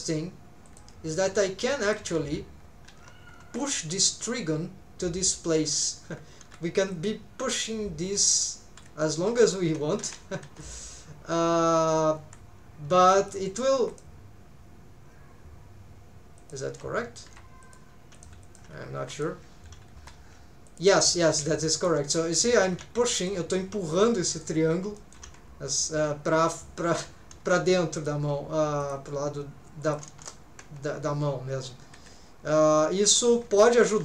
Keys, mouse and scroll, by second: 0.6 click, 1.7 middle click, 2.3 alt+z, 2.6 scroll up 1, 2.9 alt+z, 3.4 1, 3.6 click, 6.4 k, 10.0 alt+a, 10.4 2, 10.6 click, 12.2 x, 13.8 1, 13.9 click, 16.4 shift+click, 17.3 m, 18.1 click, 18.4 shift+click, 19.0 m, 19.6-20.0 scroll down 1, 20.0 3, 20.7 alt+shift+click, 21.3 alt+a, 21.8 alt+shift+click, 22.6 alt+a, 23.0 middle click, 24.1 middle click, 24.6 scroll up 2, 25.0 shift+middle click.